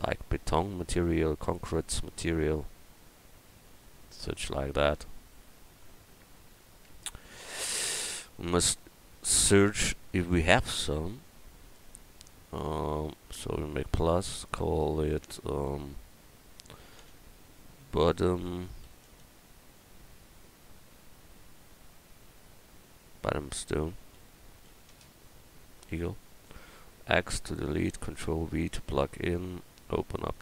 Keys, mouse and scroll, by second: 9.9 KP_1, 13.6-16.8 drag, 18.3 t, 27.1 x, 28.2 ctrl+v, 30.3 click.